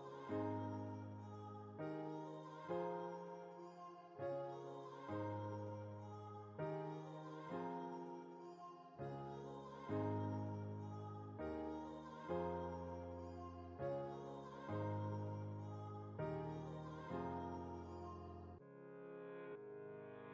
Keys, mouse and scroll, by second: 3.0-4.3 alt+right drag, 4.3-7.1 drag, 8.4 alt+right click, 9.3 alt+scroll up 1, 13.1 space, 14.2 click, 14.5 space, 15.0-19.8 alt+right drag, 19.7 click, 19.8-20.3 drag.